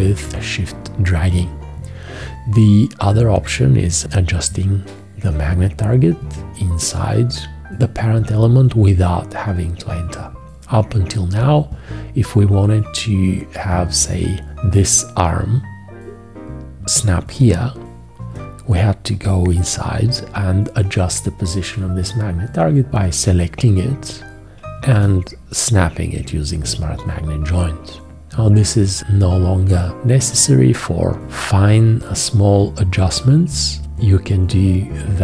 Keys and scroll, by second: 25.0 `.